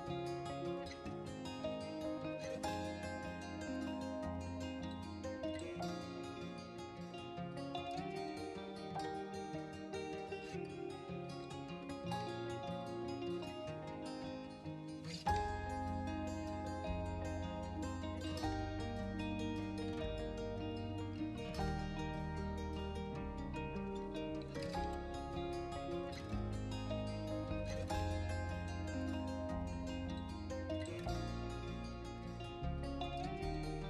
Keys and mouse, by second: 0.0-0.4 middle drag, 0.6 s, 0.7 x, 1.4 Escape, 1.5 s, 1.7 x, 2.0 Escape, 2.2-2.8 middle drag, 3.2 middle click, 3.7 right click, 4.5 middle click, 4.8 s, 4.9 x, 6.7 Escape, 6.8 s, 7.0 x, 7.5 Escape, 7.7 middle click, 8.4 middle click, 9.6 middle click, 10.0-10.6 right drag, 11.1 s, 11.2 x, 11.8 Escape, 12.2-12.9 right drag, 13.2 middle click, 13.6 s, 13.7 x, 14.4 Escape, 14.4-14.7 middle drag, 15.0 middle click, 15.6-16.7 middle drag, 17.3-17.9 middle drag, 18.0-18.5 middle drag, 18.6-18.9 middle drag, 19.4-20.1 middle drag, 21.2 shift+d, 21.4 ctrl+shift+z, 22.2 right click, 22.4 r, 22.6 z, 23.2 right drag, 23.4-24.1 middle drag, 24.2-25.3 middle drag, 25.5 middle click, 26.7 middle click, 27.2 middle drag, 27.7 shift+d, 27.9 shift+z, 28.4 drag, 28.6-29.0 middle drag, 29.2 middle click, 29.6 middle click, 30.2 middle click, 31.1 middle click, 31.6-33.8 typing, 32.0-32.4 drag.